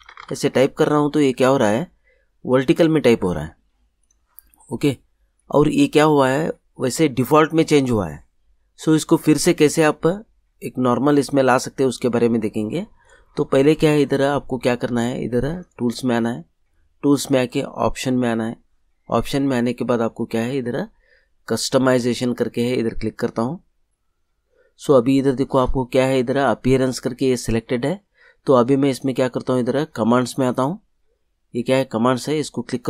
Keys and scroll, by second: 0.0-0.7 typing.